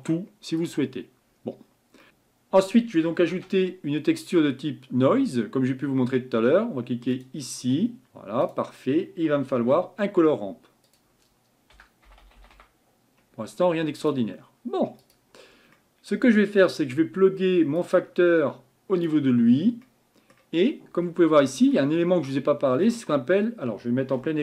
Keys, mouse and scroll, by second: 2.1 Delete, 19.1 click, 19.4-21.6 scroll down 4, 21.6-22.0 scroll down 1.